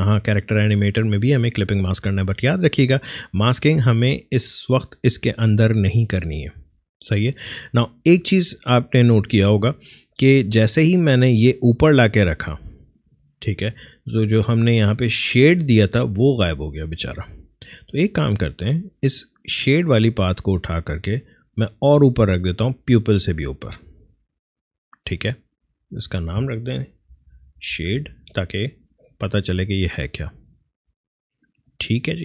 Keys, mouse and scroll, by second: 12.8 click, 14.7 scroll up 2, 16.3-25.5 drag, 25.6 click, 26.9-28.4 typing, 31.1 click.